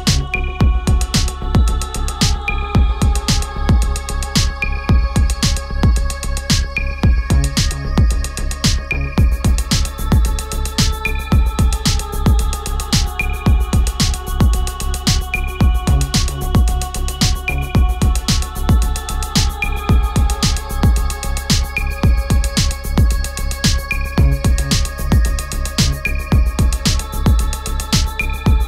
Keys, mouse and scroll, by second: 1.7 click, 6.9-15.2 drag, 15.2 ctrl+t, 16.9-24.3 alt+drag, 24.3-28.6 drag.